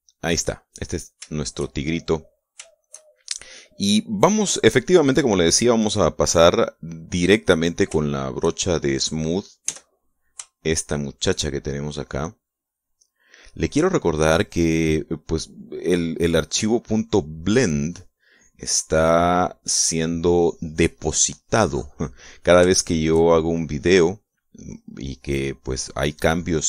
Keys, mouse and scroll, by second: 0.6-2.8 middle drag, 2.8-4.0 shift+middle drag, 4.8-8.6 middle drag, 10.2 s, 11.1 shift+click, 13.0 click, 14.2-23.0 drag, 23.2 shift+middle click, 24.5 click, 25.1 click.